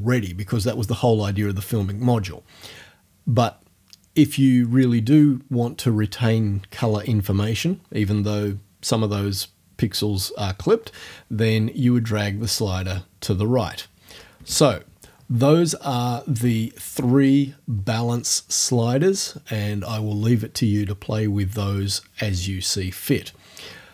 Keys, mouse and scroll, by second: 13.7 click, 14.5 Return.